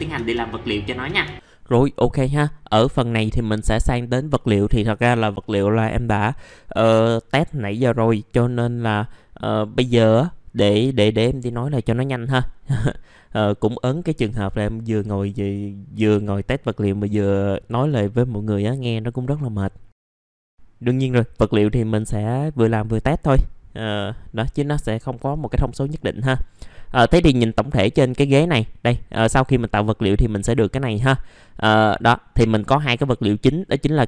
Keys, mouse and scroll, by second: 1.3 middle click.